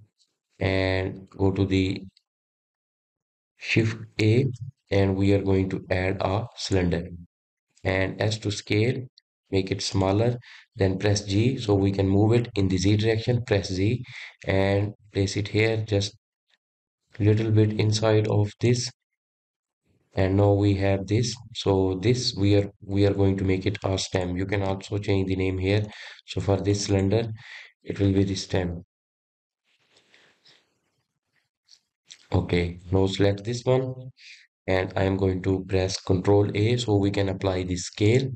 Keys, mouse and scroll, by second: 0.2 Tab, 0.9-2.8 middle drag, 2.8-3.9 drag, 4.6 click, 5.4 shift+a, 8.9 s, 12.7 g, 20.1-24.9 middle drag, 25.1 click, 26.8 click, 27.7 click, 27.9-30.8 drag, 30.8 \, 33.0 click, 33.7 click, 34.6-37.7 scroll up 2, 37.9 ctrl+a.